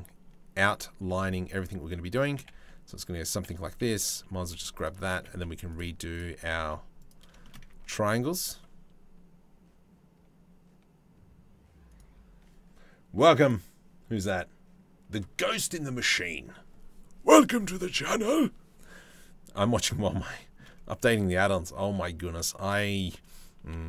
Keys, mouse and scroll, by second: 0.6 g, 1.8 click, 1.9 g, 3.5 2, 3.6 click, 4.0 g, 4.7 g, 6.0 g, 7.0 shift+click, 7.4 ctrl+r.